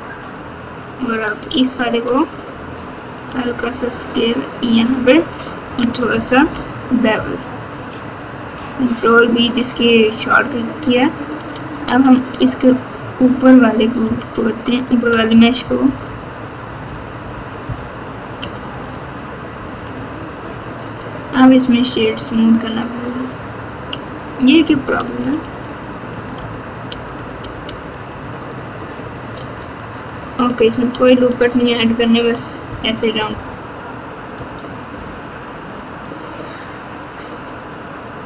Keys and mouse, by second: 1.5 alt+click, 3.2 s, 6.3 ctrl+b, 11.5 Tab, 14.0 KP_2, 15.0-17.3 typing, 18.3 KP_8, 18.6 KP_8, 19.9 Tab, 20.4 Tab, 20.8-22.2 right drag, 23.0 right click, 25.0 ctrl+z, 25.3 ctrl+z, 25.7 ctrl+z, 26.1 ctrl+z, 26.8 ctrl+z, 27.1 ctrl+z, 27.4 ctrl+z, 27.6 ctrl+z, 28.0 ctrl+z, 31.8 ctrl+shift+z, 34.3 Tab, 36.1 right click, 36.3 click.